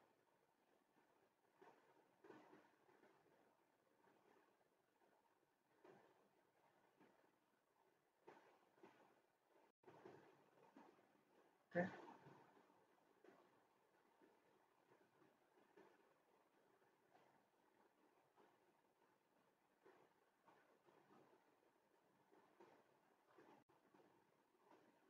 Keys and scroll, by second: 9.3 typing, 9.7 Return, 10.5 Escape, 23.3 typing, 23.6 Return.